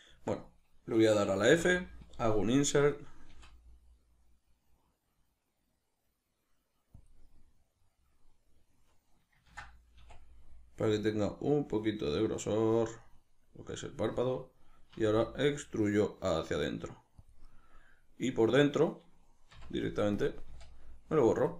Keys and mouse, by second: 7.1 click, 9.5 ctrl+z, 12.9 click, 14.9 e, 17.3 click, 17.4-19.5 middle drag, 19.5 x, 20.8-21.5 middle drag.